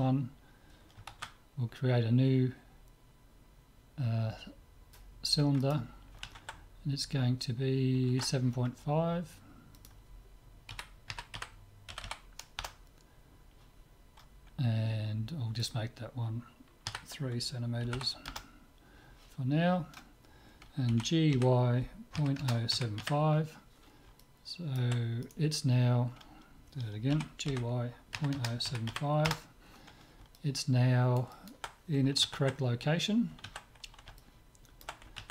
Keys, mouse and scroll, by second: 1.3 shift+a, 9.8-11.8 drag, 12.1 m, 15.6-17.4 drag, 20.9 g, 27.1 g, 30.4-32.5 middle drag, 34.2-35.3 middle drag.